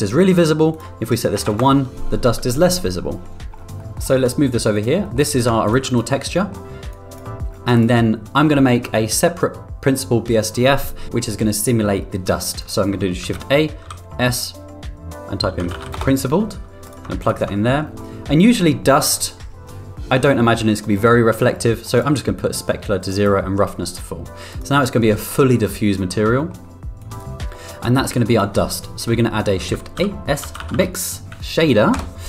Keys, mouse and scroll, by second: 3.6 g, 3.7 middle click, 4.5 g, 5.1 middle drag, 5.6 click, 6.4 middle click, 6.9 click, 7.7 click, 13.2 shift+a, 17.2 ctrl+click, 17.6 middle click, 21.9 click, 23.0 click, 24.5 click, 26.4 middle click, 27.0 click, 27.5 middle drag, 28.3 click, 29.5 shift+a.